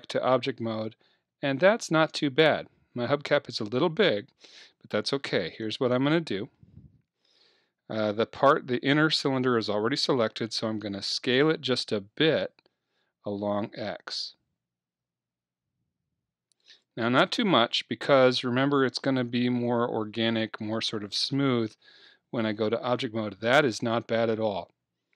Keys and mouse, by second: 0.2-2.2 middle drag, 5.5 Tab, 6.6-8.6 middle drag, 14.2 s, 16.8-18.7 drag, 18.7 middle click, 21.9 Tab.